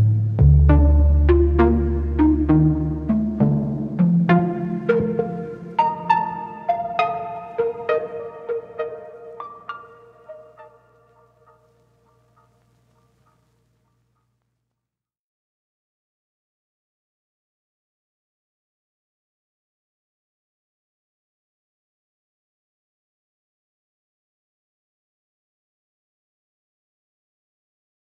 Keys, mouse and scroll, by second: 0.6 u, 4.6-6.0 drag, 6.8 click, 7.9-10.6 drag, 10.6 Tab, 11.4-13.0 drag, 13.0 Tab, 15.1 u, 17.1 middle click, 17.5 Tab, 17.7 scroll up 2, 18.0-19.2 middle drag, 19.2 Tab, 19.6 click, 20.6-21.1 ctrl+z, 21.2 ctrl+z, 21.4 ctrl+z, 21.7 ctrl+z, 22.7-23.7 drag, 23.7 Tab, 23.9 scroll down 2, 24.2 Tab, 25.8 scroll up 4, 26.4 scroll up 4, 27.1 click, 28.1 ctrl+shift+t.